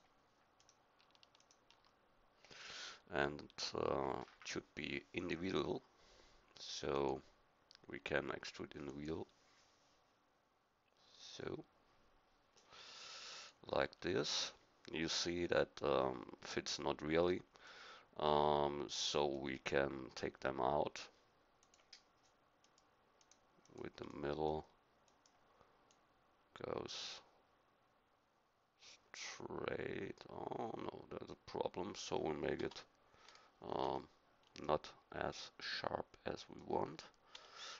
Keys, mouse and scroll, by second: 2.4-4.9 drag, 13.9-17.6 middle drag, 17.8-19.6 middle drag, 21.6-22.6 drag, 24.1 middle click, 32.6 KP_1, 32.6 KP_0, 33.8 KP_1.